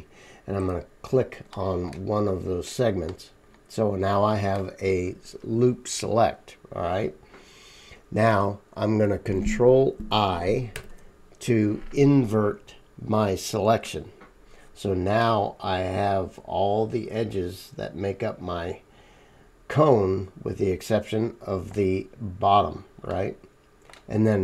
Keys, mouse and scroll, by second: 3.1 middle click, 3.5-16.4 right drag, 10.7 ctrl+i, 16.4-23.2 middle drag, 18.5 right click, 23.2-24.4 right drag.